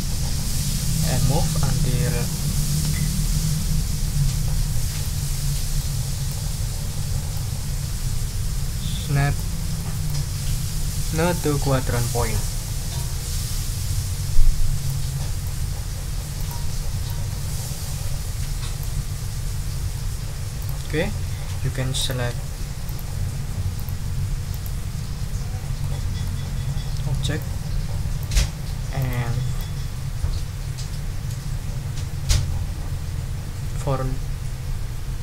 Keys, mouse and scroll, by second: 1.0-5.2 drag, 5.3 ctrl+scroll up 2, 5.8 ctrl+click, 12.1 ctrl+click, 12.3 ctrl+scroll down 2, 12.6 ctrl+click, 13.6 ctrl+d, 14.9 click, 16.4 click, 20.1 ctrl+scroll down 2, 20.6 ctrl+click, 22.0 ctrl+click, 22.8 shift+click, 23.7 shift+click, 24.5 shift+click, 25.8 click, 27.4-28.4 ctrl+drag, 28.5 ctrl+scroll down 2, 29.0 ctrl+middle click, 29.1 ctrl+click, 29.6-35.2 drag.